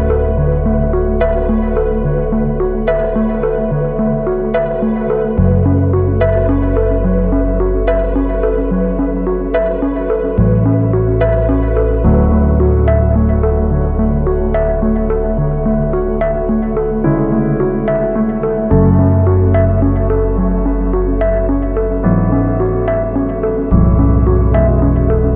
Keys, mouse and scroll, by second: 0.6 ctrl+z, 1.7 alt+BackSpace, 3.5 ctrl+t, 4.6 alt+shift+click, 7.7 Return, 20.0 double click, 21.6 ctrl+-, 22.0 ctrl+-, 24.1 double click.